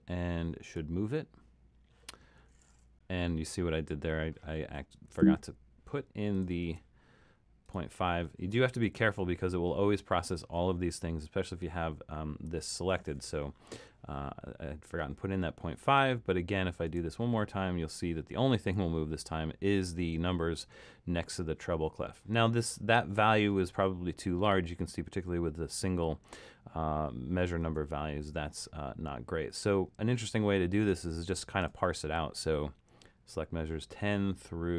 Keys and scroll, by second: 5.1 super+z, 6.8 super+z, 8.8 5, 27.6 super+z.